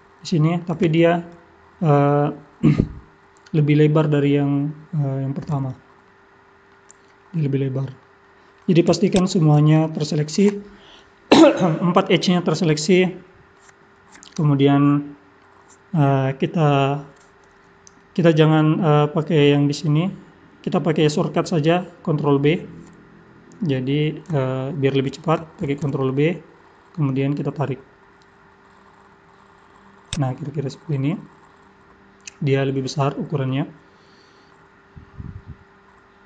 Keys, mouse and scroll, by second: 0.0 middle click, 6.1 middle click, 7.1 middle click, 8.2 middle click, 9.1 shift+click, 9.7 middle click, 12.7 middle click, 25.6 ctrl+b, 30.5 middle click, 33.7-34.2 scroll up 2, 34.2 scroll down 1, 34.5 middle click.